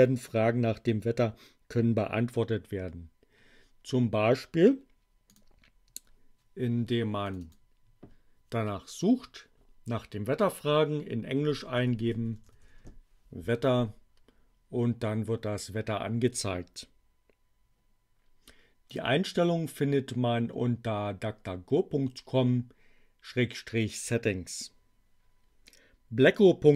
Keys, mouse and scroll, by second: 5.3 click, 7.2 click, 11.1-13.0 typing, 18.8 click.